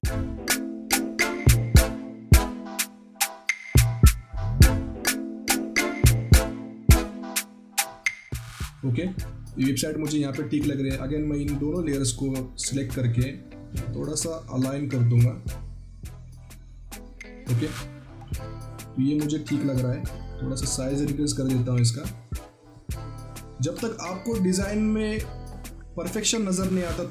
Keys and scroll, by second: 18.0 ctrl+t, 18.7 ctrl+alt+t.